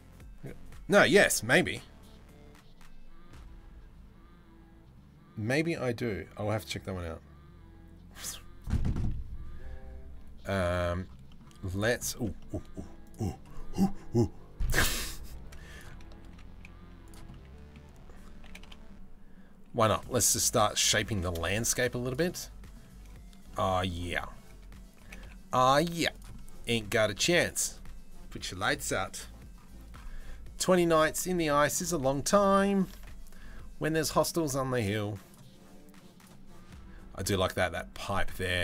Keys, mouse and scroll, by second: 10.9 middle click, 11.7 middle click, 12.0 shift+middle click, 14.7 middle click, 15.8 s, 16.9 middle click, 18.1 g, 19.7 middle click, 20.7 g, 21.9 middle click, 23.1 middle click, 24.7 g, 26.0 middle click, 30.6 middle click, 31.7 shift+middle click, 33.1 ctrl+s, 34.8 middle click.